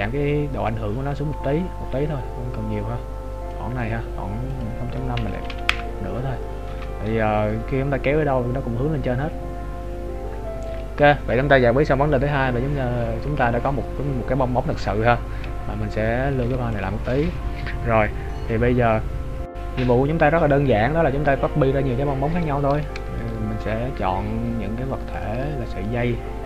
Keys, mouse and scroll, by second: 4.5 click, 6.7 g, 16.4 ctrl+s, 23.2 shift+right click, 24.5-25.1 scroll down 3, 25.1 shift+click.